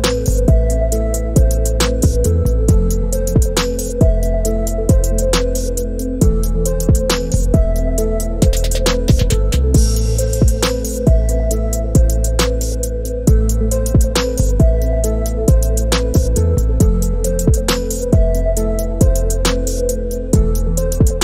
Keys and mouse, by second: 2.2-4.5 drag, 6.1 click, 7.1 click, 8.5 click, 9.7 click, 11.7 click, 13.0 click, 13.3 KP_0, 14.4-15.6 drag, 18.2 click, 20.5 click.